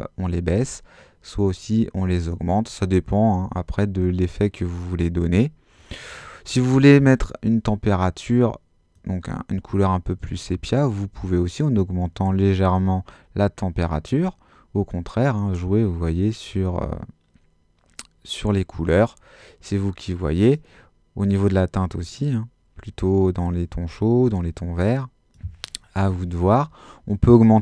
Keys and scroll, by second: 26.0 0.